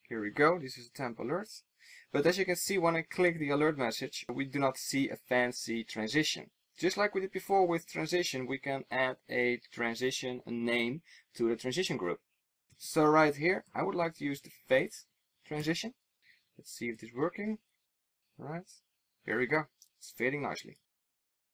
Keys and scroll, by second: 15.7 super+s.